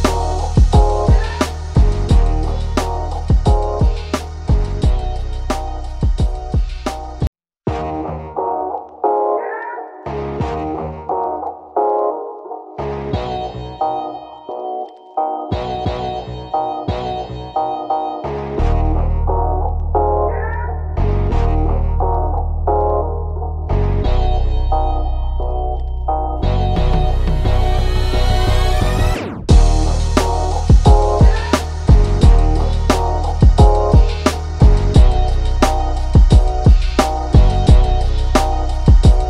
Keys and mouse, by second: 1.6 click, 2.3 ctrl+=, 2.9 click, 4.3 ctrl+=, 4.8-7.1 drag, 7.3-8.8 drag, 8.8 ctrl+z, 9.5-11.3 drag, 11.7 click, 14.8 right click, 15.3 click, 16.0 ctrl+-, 16.5-19.5 drag, 21.0-22.9 drag, 24.3 right click, 25.0-29.8 drag, 32.7 click, 34.8 click, 37.2 click.